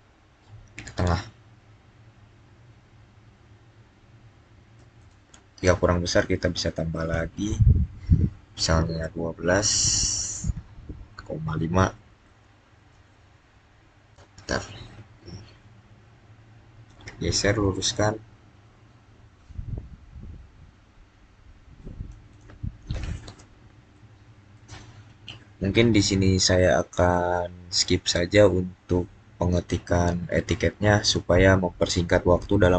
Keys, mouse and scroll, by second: 0.8 click, 6.9 click, 10.1-10.4 typing, 11.7-12.6 typing, 14.0 Return, 16.7 click, 23.4-23.8 scroll down 1, 23.8 middle click, 24.7-25.8 scroll down 1, 27.2-30.0 middle drag.